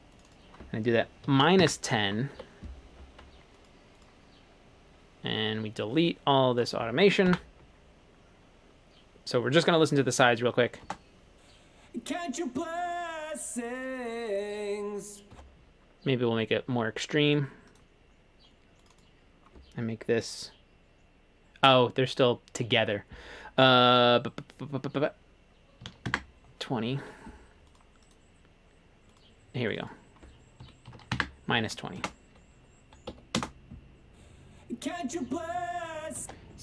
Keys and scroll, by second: 0.8-2.4 typing, 2.4 Escape, 7.4 Delete, 10.9 space, 15.4 space, 25.7-27.1 typing, 27.1 Escape, 30.5-32.1 typing, 33.2 ↺, 36.3 space.